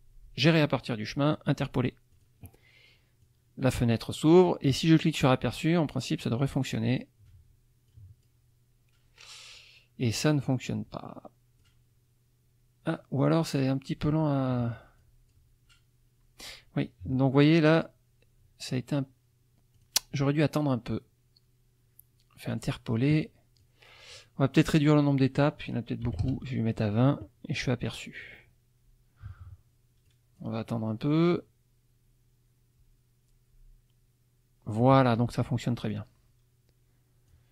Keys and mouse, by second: 2.1 click, 3.2-4.1 drag, 5.1 click, 7.9-8.4 drag, 11.6 click, 13.2 click, 15.0 click, 19.8 click, 22.5 click, 23.6 click, 25.1 click, 26.0 KP_2, 26.2 KP_0, 27.8 click, 30.1 click, 35.9-37.5 drag.